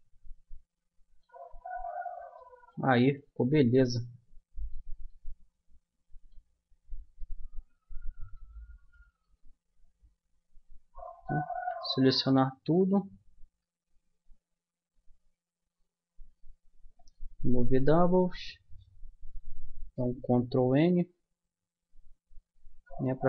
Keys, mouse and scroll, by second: 1.5 middle click, 3.2 Tab, 7.2 Tab, 8.3 Tab, 9.3 Tab, 11.5 a, 11.9 a, 13.4 w, 20.3 ctrl+n, 23.1 a.